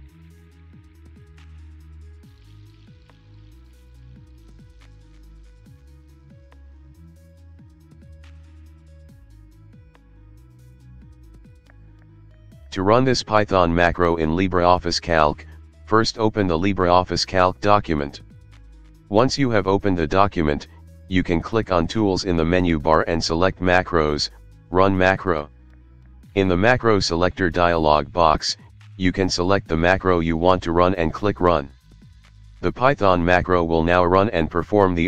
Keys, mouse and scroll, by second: 0.0-0.2 typing, 3.9-5.0 typing, 6.4 i, 6.5 ctrl+5, 7.4-16.6 typing, 10.9 Return, 17.1 Return, 20.8 click, 26.2 click, 32.2 ctrl+2.